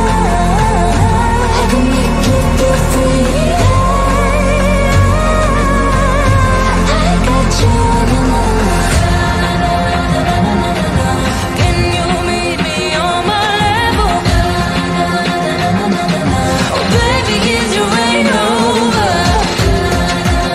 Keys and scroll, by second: 3.2 ctrl+g, 5.0 c, 5.1 shift+Page_Down, 7.0 c, 9.3 shift+F2, 11.9 c, 17.5 shift+F2.